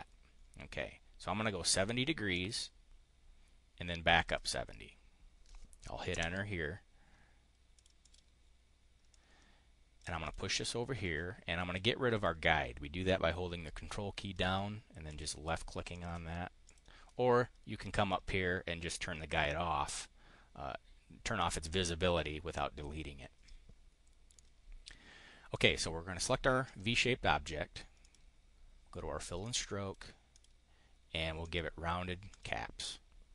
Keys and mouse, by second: 2.3 ctrl+click, 4.0 ctrl+click, 6.1 Return, 7.6 click, 7.9 click, 9.0-10.0 drag, 10.1 click, 15.0 ctrl+click, 15.9 ctrl+click, 16.6 click, 17.9 click, 19.8 click, 25.5 click, 28.0 click, 29.3 click, 30.3 click, 31.3 click, 32.2 click.